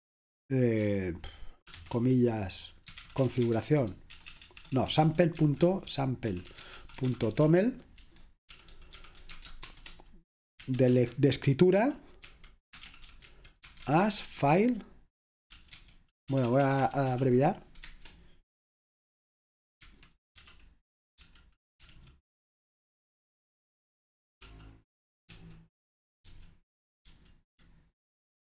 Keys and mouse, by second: 1.8-17.9 typing, 8.0 Escape, 19.9-21.8 typing, 25.1-27.1 typing.